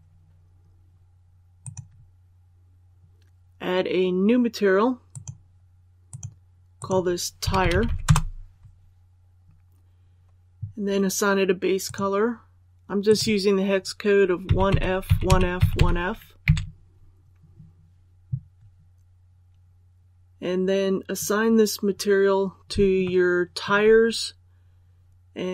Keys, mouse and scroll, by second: 1.5 click, 7.3-7.7 typing, 7.9 Return, 11.7 click, 14.3-15.6 typing, 20.8-22.6 scroll up 1, 22.9 shift+middle click, 23.3 shift+scroll up 1.